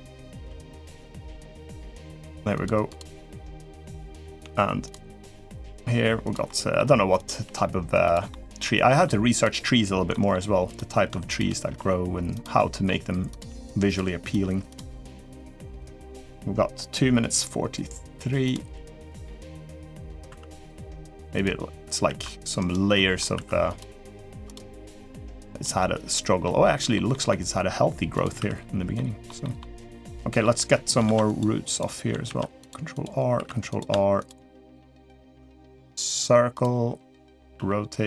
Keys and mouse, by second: 0.2 g, 1.7 click, 1.9 g, 2.6 click, 3.5 middle click, 3.5 g, 4.1 click, 4.9 g, 5.1 g, 6.2 middle click, 6.9 click, 7.6 g, 8.7 middle click, 9.9 middle click, 10.4 click, 11.1 shift+click, 11.4 g, 12.3 middle click, 13.1 click, 13.4 g, 14.0 click, 14.2 g, 15.0 click, 15.5 click, 15.7 g, 18.8 click, 19.0 g, 19.8 middle click, 20.4 click, 20.4 2, 20.6 g, 21.8 ctrl+r, 22.7 middle click, 23.6 2, 24.0 3, 24.3 click, 24.5 g, 25.5 middle click, 26.4 middle click, 26.9 middle click, 28.1 2, 28.7 middle click, 29.2 middle click, 29.8 middle click, 30.7 3, 30.8 ctrl+r, 32.0 ctrl+r, 33.1 3, 33.4 click, 33.9 shift+click, 34.7 shift+click, 36.3 click, 37.3 r.